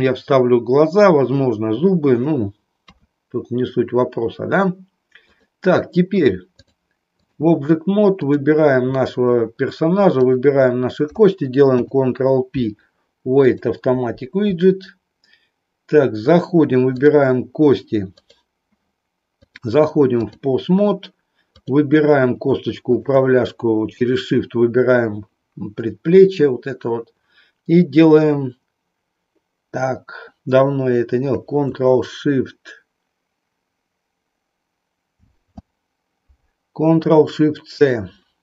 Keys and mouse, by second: 2.9 KP_3, 5.2 click, 6.5 click, 8.1 click, 11.7 ctrl+p, 19.4-20.4 drag, 21.5 click, 22.9 shift+click, 35.1 ctrl+shift+c.